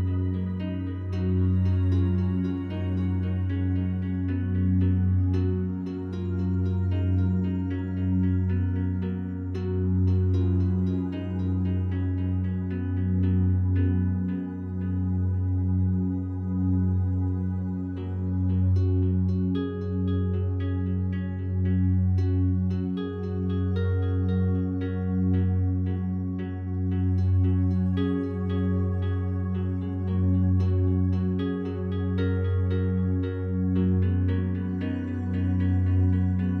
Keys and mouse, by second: 0.3 click, 0.8 s, 1.1 z, 1.8 click, 2.6 i, 3.0 click, 3.9 typing, 4.2 click, 5.1-9.7 typing, 5.8 Return, 6.5 click, 8.4 click, 10.1 click, 10.8-11.5 typing, 13.9-15.1 typing, 14.2 click, 18.8 space, 19.5 click, 22.2 space, 23.7 alt+click, 24.3 click, 29.7-30.0 ctrl+alt+drag, 30.3 click, 32.2 click, 33.3 click, 35.1-36.5 alt+drag.